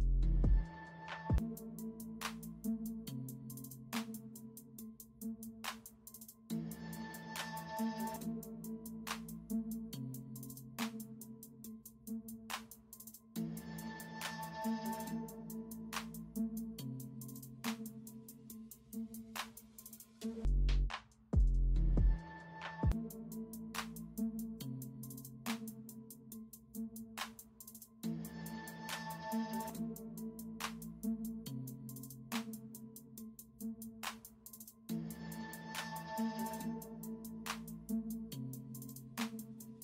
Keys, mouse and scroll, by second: 3.1 b, 4.2 ctrl+alt+z, 8.2 space, 8.7 space, 9.1 space, 10.9 ctrl+alt+z, 11.7-13.1 typing, 15.0 space, 16.0 [, 23.2 space, 23.5 space, 25.7 e, 30.0 ctrl+alt+z, 31.1 ctrl+alt+z, 32.5 ctrl+alt+z, 33.4 ctrl+alt+z, 34.7 space, 35.3 ctrl+space, 36.1 b, 39.7 ctrl+alt+z.